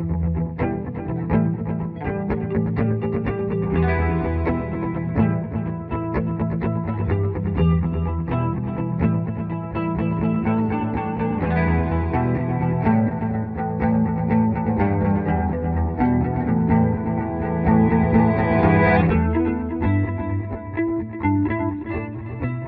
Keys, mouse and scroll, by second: 1.2 Escape, 3.3 click, 4.3 F2, 6.4 alt+Right.